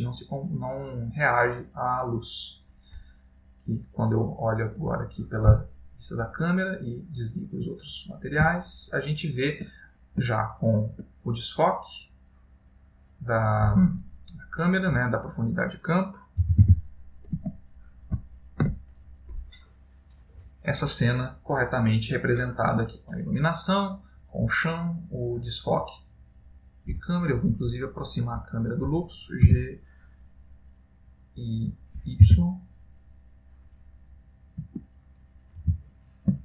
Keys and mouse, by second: 4.0 click, 8.9 ctrl+middle click, 11.4 ctrl+middle click, 14.8 click, 16.7 g, 28.0 click, 29.7 g.